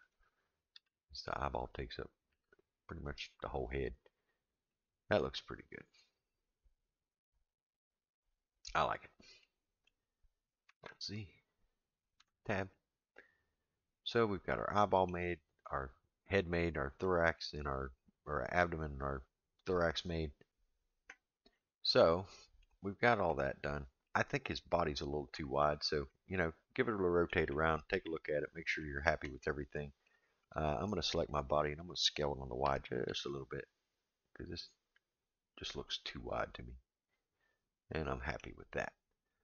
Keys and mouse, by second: 0.7 g, 2.3 s, 4.7-8.8 middle drag, 9.4 middle click, 10.7 alt+z, 12.2 Tab, 12.7-15.1 middle drag, 17.0-17.4 shift+middle drag, 21.5-22.6 middle drag, 23.3-24.1 middle drag, 25.7 click, 26.1-27.3 middle drag, 27.5 a, 27.5-28.6 middle drag, 28.8 middle drag, 29.3 click, 29.7-30.1 middle drag, 30.5 click, 31.2-32.1 middle drag, 32.6 s, 35.8-38.4 middle drag, 39.3 middle drag.